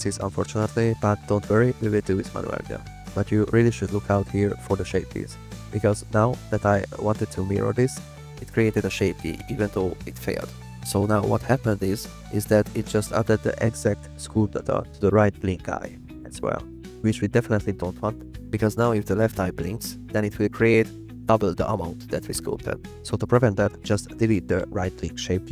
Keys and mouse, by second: 15.3-20.6 drag, 21.0 click, 21.8-23.7 drag.